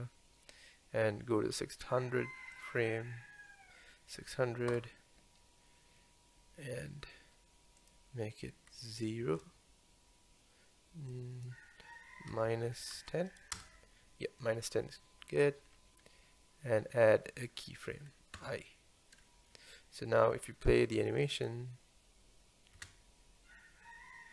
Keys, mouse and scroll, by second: 2.6-3.3 drag, 4.8 Right, 7.8-10.8 drag, 11.1-14.1 drag, 21.4 click, 22.8 space.